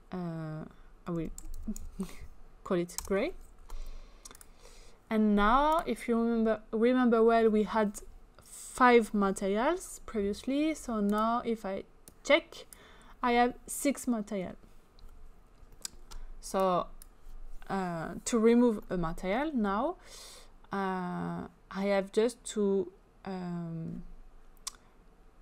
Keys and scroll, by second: 0.9-2.3 typing, 2.9 Return.